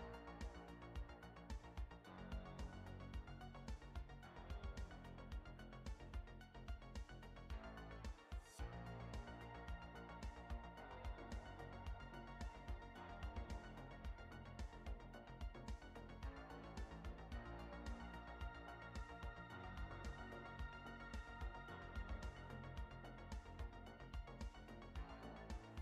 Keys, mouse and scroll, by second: 1.0 scroll down 1, 1.5 middle click, 3.7 middle click, 6.5 s, 9.4 g, 14.8 s, 21.2 shift+middle click, 25.1 middle click.